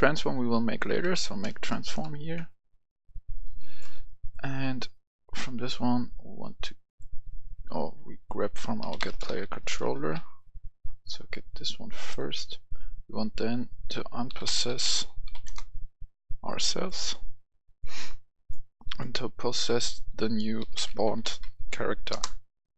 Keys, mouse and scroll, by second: 0.9-1.6 typing, 1.9 Return, 3.0 click, 4.1 right click, 5.3-7.6 drag, 7.6-8.7 right drag, 8.8-10.1 typing, 12.1 click, 14.3-15.3 typing, 15.5 Return, 16.5-19.6 drag, 20.6-21.4 typing, 22.1 Return.